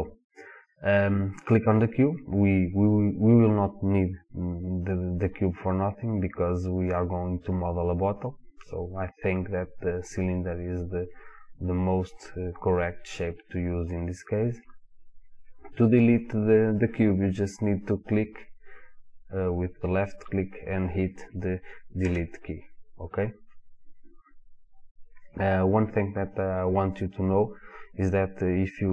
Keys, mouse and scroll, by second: 0.7 click, 1.6 click, 15.8 click, 16.7 click, 17.5 drag, 18.0 click, 22.0 Delete.